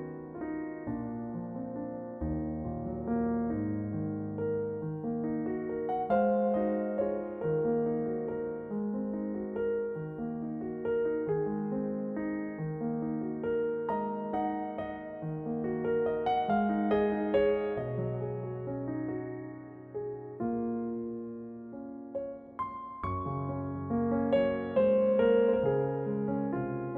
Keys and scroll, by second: 1.6 a, 1.8 l, 2.3 r, 3.3 g, 5.6 s, 9.2 l, 9.7 g, 15.3 l, 18.7 a, 19.4 l, 19.9 g.